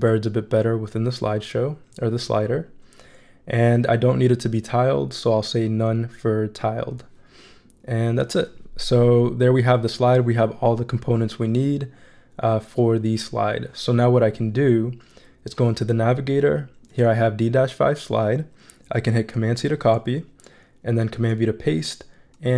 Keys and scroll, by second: 19.3 super+c, 21.1 super+v.